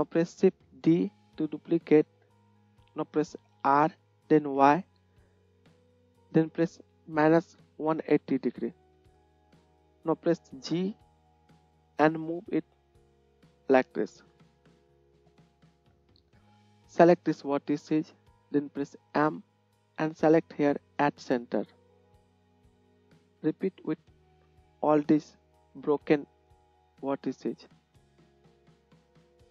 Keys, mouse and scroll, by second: 0.9 shift+d, 3.8 r, 10.8 g, 19.3 m, 21.3-24.0 middle drag, 21.7-24.0 drag, 21.7-24.0 right drag, 23.3 m, 26.8 shift+click, 26.8 shift+middle click, 26.8 shift+right click, 27.2 shift+click, 27.2-29.5 shift+middle drag, 27.2 shift+right click, 29.3-29.5 drag, 29.3-29.5 right drag.